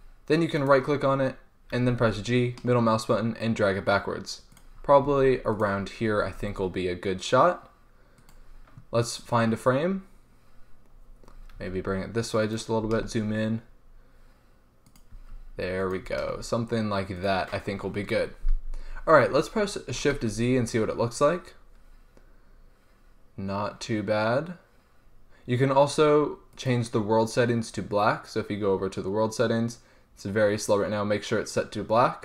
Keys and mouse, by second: 0.0 n, 0.6-1.8 drag, 1.8 g, 4.6-6.8 drag, 5.1 g, 6.3 g, 7.2 click, 11.1-11.8 middle drag, 11.8 g, 12.8-14.5 drag, 13.0 g, 14.5 middle click, 15.2-15.5 drag, 15.3 g, 16.2 g, 20.5 shift+z, 29.8 click.